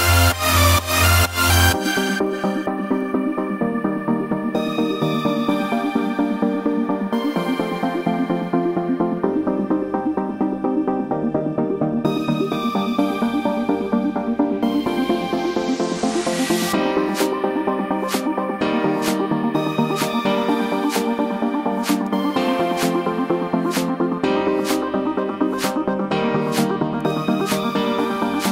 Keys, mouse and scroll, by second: 0.2 click, 0.7 click, 1.1 click, 1.7 click, 1.9 click, 2.1 click, 2.3 click, 2.9 click, 3.0 click, 3.2 click, 3.2 click, 3.6 scroll, 4.0 h, 4.4 click, 5.2 click, 5.4 click, 5.5-6.1 scroll, 6.1 click, 7.2 click, 9.2 click, 10.3 ctrl+0, 10.8-11.1 scroll up 6, 13.0-13.5 scroll.